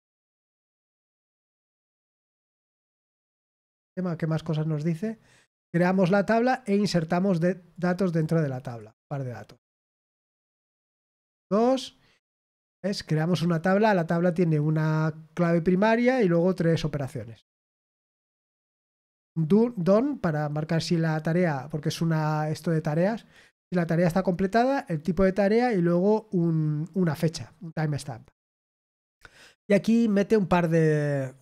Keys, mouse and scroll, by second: 0.6 ctrl+v, 1.2 click, 1.6 ctrl+v, 3.6 click, 4.4-4.9 scroll down 1, 5.8-7.8 drag, 8.0 right click, 8.6 click, 9.4 click, 10.7 Return, 11.0 ctrl+v.